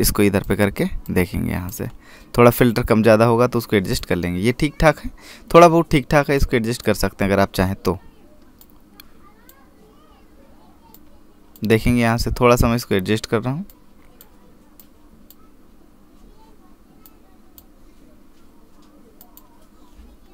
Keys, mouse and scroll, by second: 0.5 click, 2.7 scroll up 1, 3.3-4.2 scroll down 1, 4.8 click, 7.2 click, 14.8 click.